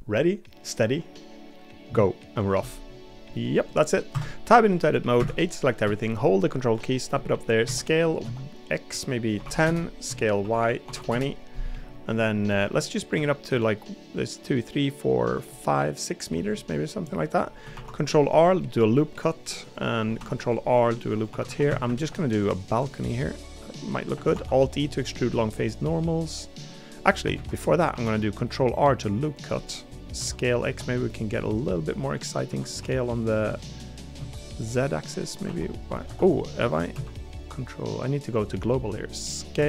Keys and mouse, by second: 4.1 Tab, 5.2 a, 7.2 middle click, 7.6 s, 10.0 s, 12.2 middle click, 16.5 middle click, 17.7 ctrl+r, 21.3 3, 21.5 3, 21.7 a, 21.8 a, 23.1 middle click, 24.3 alt+e, 27.3 ctrl+z, 27.9 ctrl+r, 29.9 middle click, 30.2 s, 32.5 s.